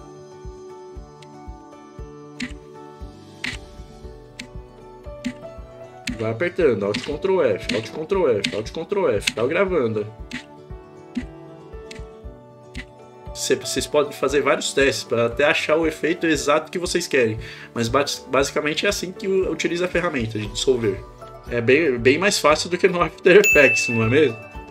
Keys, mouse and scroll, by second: 1.2 ctrl+alt+f, 3.4 ctrl+alt+f, 4.5 ctrl+alt+f, 5.2 ctrl+alt+f, 7.0 ctrl+alt+f, 7.7 ctrl+alt+f, 8.5 ctrl+alt+f, 10.3 ctrl+alt+f, 11.1 ctrl+alt+f, 11.9 ctrl+alt+f.